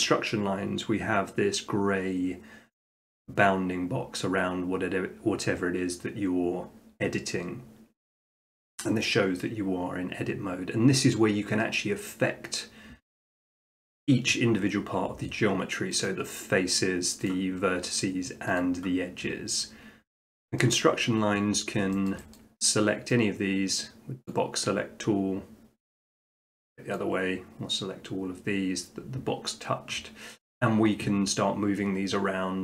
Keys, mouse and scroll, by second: 0.0 middle click, 16.1 click, 18.2 click, 18.6-19.7 drag, 20.1 middle click, 21.6 middle click, 22.1 shift+middle click, 22.4 middle click, 24.3 click, 26.9 click.